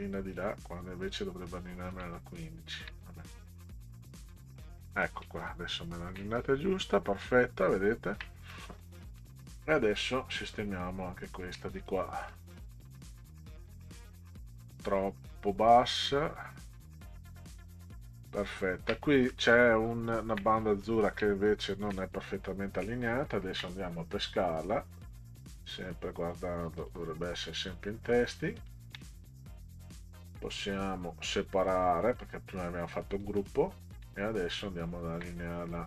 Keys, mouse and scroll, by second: 2.3 ctrl+scroll up 2, 3.9 click, 5.4-5.8 ctrl+scroll up 6, 7.1 right click, 7.5 ctrl+scroll down 2, 8.1 ctrl+scroll down 2, 8.5 middle click, 9.2 middle click, 10.0 ctrl+scroll up 4, 11.1 ctrl+scroll up 2, 11.8 click, 12.3-13.7 drag, 15.5-16.6 drag, 17.5 click, 18.3 click, 19.3 middle click, 19.8 ctrl+scroll down 2, 20.6 middle click, 21.4 ctrl+Down, 25.7 click, 26.8 click, 27.6 click, 28.6 ctrl+click, 29.1 right click, 29.9 right click, 32.0 click, 32.9 click, 33.4 click, 34.2 ctrl+scroll up 2.